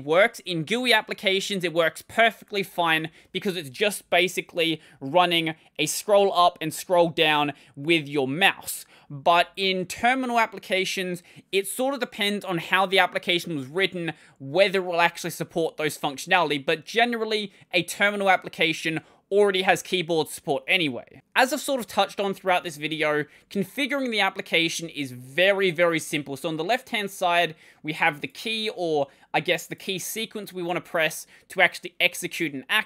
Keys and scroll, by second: 0.6-4.3 typing, 22.3 super+2.